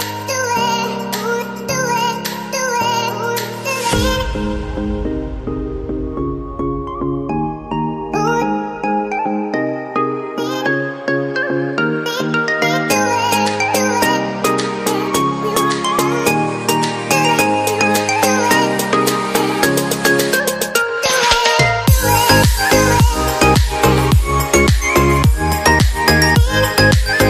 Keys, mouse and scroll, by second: 0.5 ctrl+Down, 9.5 shift+Page_Up, 17.4 ctrl+z, 21.2 right click, 22.7 ctrl+Up.